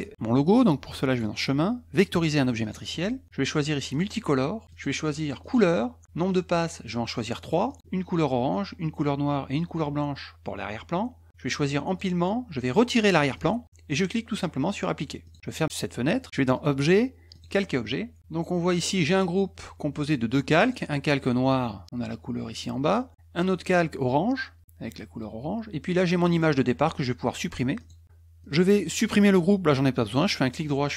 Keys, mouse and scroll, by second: 1.1 click, 2.6 click, 3.9 click, 4.7 click, 5.4 click, 7.1 click, 7.4 click, 7.7 click, 11.9 click, 13.3 click, 15.2 click, 16.5 click, 17.3 click, 18.2 click, 19.6 click, 20.6 click, 23.4 click, 26.2 click, 27.8 click, 28.4 click, 30.3 right click.